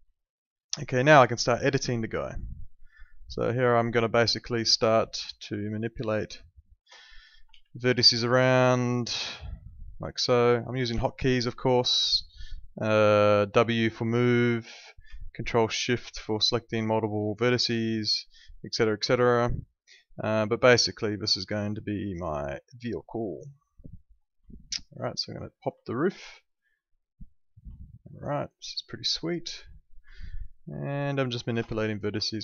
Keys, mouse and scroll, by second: 0.1 alt+middle click, 1.4 click, 1.9 alt+middle click, 2.9 alt+middle click, 3.6 alt+middle click, 4.4 alt+middle click, 5.0 click, 5.7 alt+middle click, 6.4 ctrl+shift+click, 7.5 w, 8.1 click, 9.1 alt+middle click, 10.3 alt+middle click, 10.9 alt+middle click, 12.0 alt+middle click, 12.6 click, 13.3 alt+middle click, 14.4 alt+middle click, 15.1 ctrl+shift+click, 15.9 alt+middle click, 18.0 click, 19.2 alt+middle click, 20.8 alt+middle click, 24.2 alt+middle click, 24.4 alt+middle click, 25.1 click, 25.8 alt+middle click, 26.6 click, 27.8 alt+middle click, 29.4 click, 30.1 alt+middle click, 31.0 ctrl+shift+click, 31.7 alt+middle click.